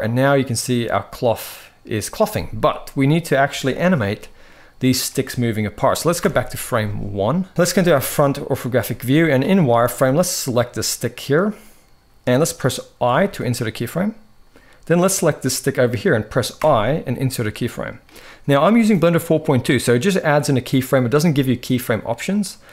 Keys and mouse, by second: 3.2 space, 3.9-4.3 middle drag, 5.9 shift+Left, 7.5 KP_1, 7.7 shift+middle drag, 8.5 z, 9.4-10.0 shift+middle drag, 10.0-11.5 drag, 12.8 i, 14.8 click, 16.3 i.